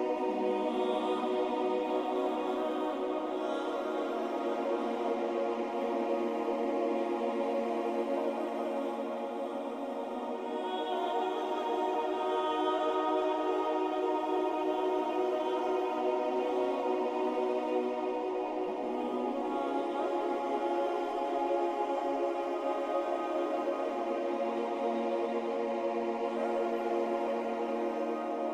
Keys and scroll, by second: 15.9 Delete, 21.9 Delete.